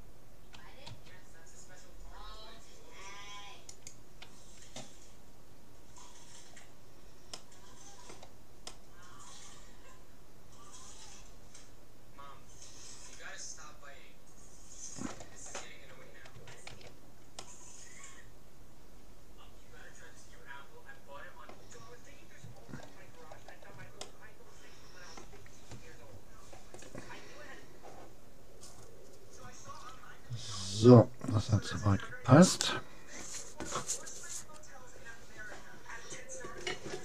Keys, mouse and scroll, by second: 4.4 a, 5.2-6.4 middle drag, 7.4-10.4 middle drag, 13.1 middle click, 16.4 Tab, 16.8 a, 17.4-19.2 middle drag, 22.6-25.8 middle drag.